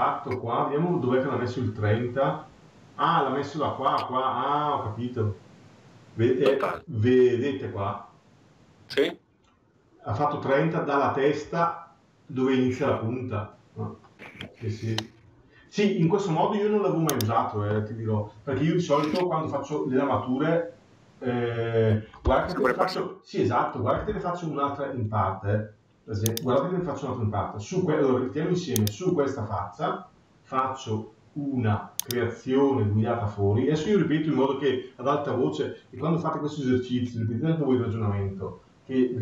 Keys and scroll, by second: 22.2 Escape.